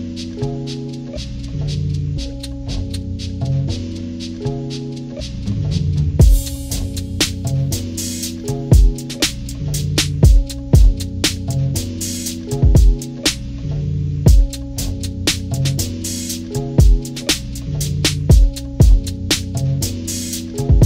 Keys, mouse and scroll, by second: 0.2 click, 3.3 click, 3.8 click, 7.4-18.6 drag.